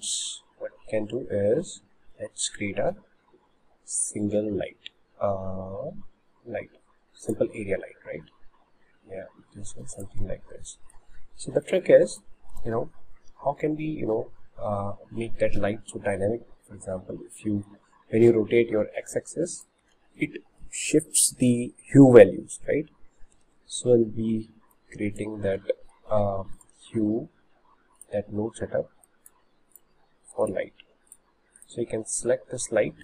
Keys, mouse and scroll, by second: 8.2 s, 10.9 middle click, 11.7 click, 15.3-17.9 middle drag, 20.0 ctrl+z, 24.8-26.6 drag, 28.1 click, 29.3 click, 30.8 click, 31.7 click.